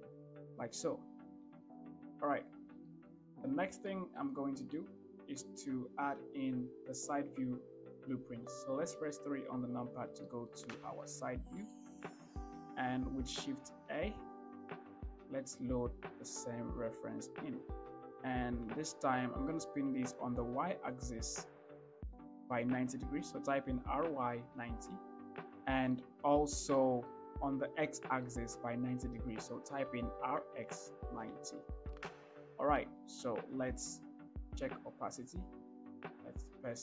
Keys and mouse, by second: 1.9 shift+middle click, 3.2 shift+middle drag, 4.2 shift+middle click, 9.3 KP_3, 10.5 shift+middle drag, 11.3 shift+middle click, 12.0 shift+middle drag, 13.9 shift+a, 19.2-19.8 shift+drag, 23.9 r, 24.4 y, 24.9 9, 25.1 0, 26.2 shift+middle drag, 27.1 shift+middle click, 28.2 shift+middle click, 30.2 r, 30.7 x, 31.3 9, 31.6 0, 34.8-36.4 drag.